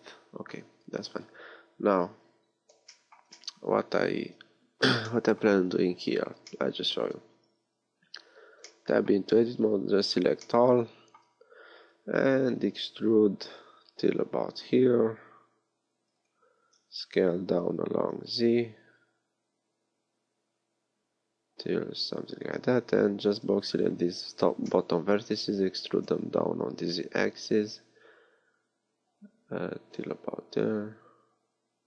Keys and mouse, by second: 2.2 KP_3, 4.3 KP_3, 7.9 z, 8.0 Tab, 12.5 e, 16.7 s, 22.8 a, 23.7 b, 25.9 e.